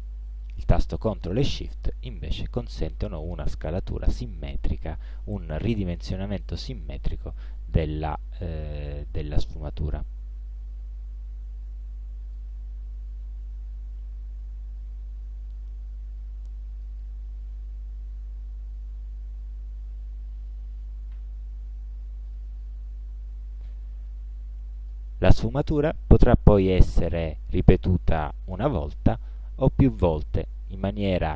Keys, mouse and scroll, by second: 1.3-12.6 ctrl+shift+drag, 14.9-17.1 drag, 22.3-25.2 drag, 30.4 click.